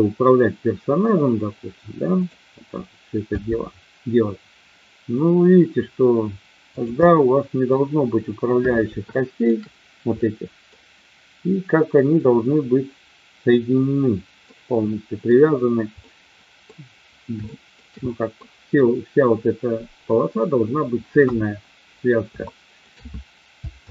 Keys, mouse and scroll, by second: 3.2 g, 6.7 click, 7.0-7.7 middle drag, 9.1 shift+middle click, 10.2-10.7 middle drag, 14.3-15.3 middle drag, 16.0-16.6 middle drag, 17.5-17.8 shift+middle drag, 18.0-18.5 middle drag, 21.1 KP_1, 22.3 shift+middle click, 23.7 ctrl+z.